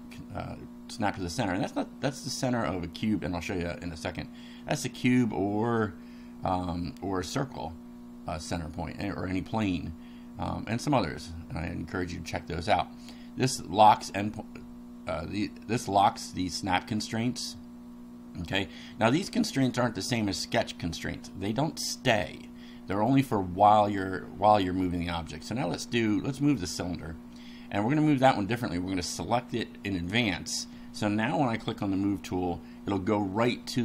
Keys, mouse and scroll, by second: 23.6-24.7 middle drag, 29.3 click, 33.4 click.